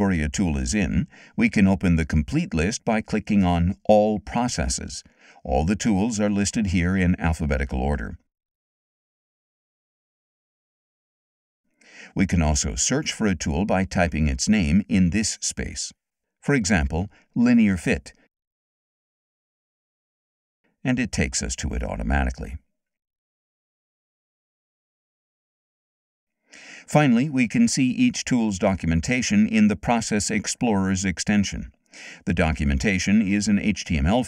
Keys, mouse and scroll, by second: 2.4 click, 5.1 click, 6.8 click, 8.4-13.5 drag, 15.2 click, 17.1-19.0 typing, 20.8 click.